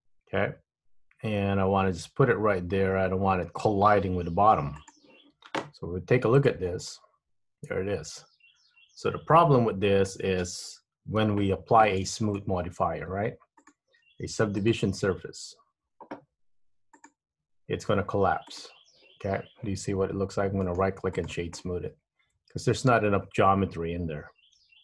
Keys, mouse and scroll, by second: 6.6 click, 7.0 middle click, 11.4 Tab, 11.9 middle click, 13.8 click, 14.8 click, 18.7 click, 20.8 right click, 21.8 middle click.